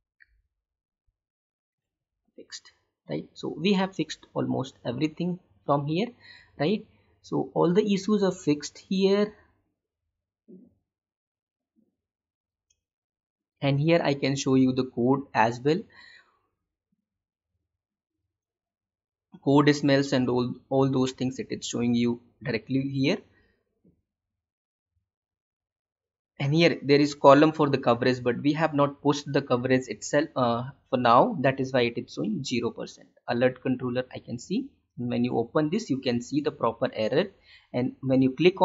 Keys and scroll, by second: 1.0 Delete, 2.0 alt+Tab.